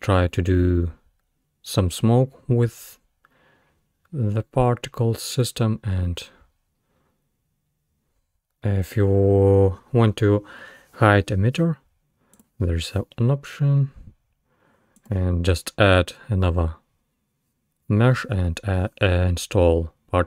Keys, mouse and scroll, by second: 8.4-11.5 scroll down 2, 12.4 click, 15.0 click.